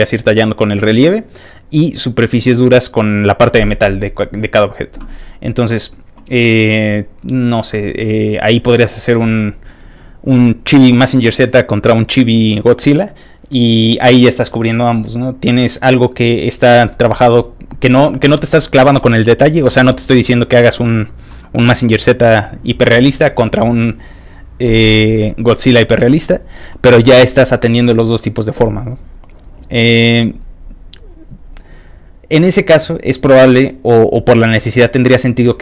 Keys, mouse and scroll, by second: 24.5-30.0 scroll up 1, 30.0-35.6 scroll up 1.